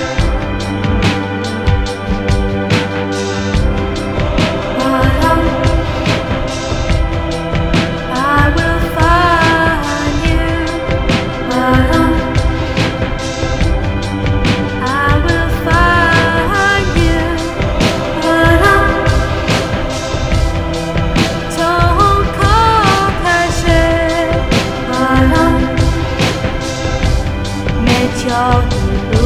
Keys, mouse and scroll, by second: 0.7 F9, 5.2 F9, 8.1 click, 10.4 click, 14.9 click, 18.6 click, 21.4 click.